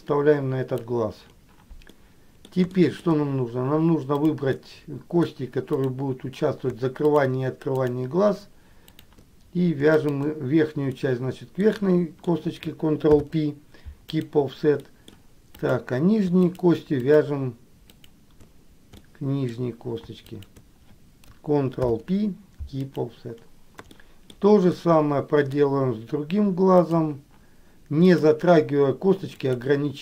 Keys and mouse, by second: 2.2 middle click, 2.8 shift+middle click, 4.4 click, 4.8 middle click, 5.9 click, 7.2 shift+click, 7.9 shift+click, 9.1 shift+click, 11.2 middle click, 13.3 ctrl+p, 14.9 middle click, 15.8 click, 16.7 shift+click, 18.1 shift+click, 19.2 middle click, 20.5 shift+click, 22.0 ctrl+p, 24.2 shift+middle click, 25.0 middle click, 27.1 click, 29.7 click.